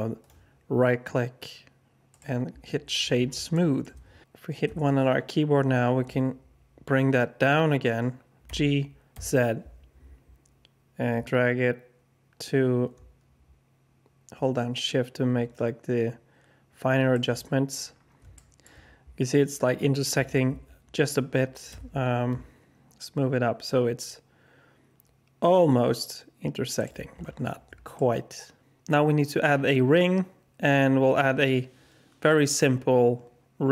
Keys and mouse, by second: 0.2 click, 3.5-3.8 shift+drag, 4.6 KP_1, 8.4 g, 18.3 alt+shift+drag, 20.4 g, 27.9-28.8 alt+drag.